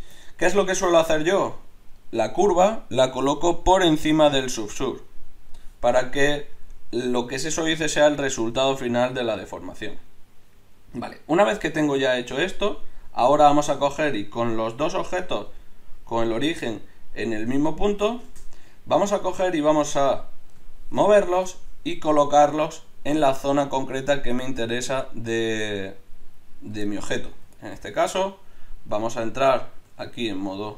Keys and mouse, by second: 1.3 Tab, 9.3-13.3 drag, 14.5-20.9 drag, 29.9 Tab.